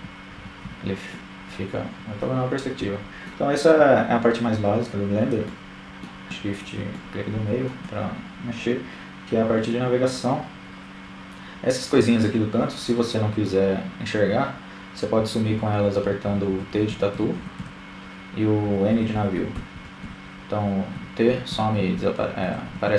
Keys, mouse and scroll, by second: 1.9-4.8 middle drag, 11.6-13.9 typing, 15.0-20.0 typing, 21.4-22.8 typing.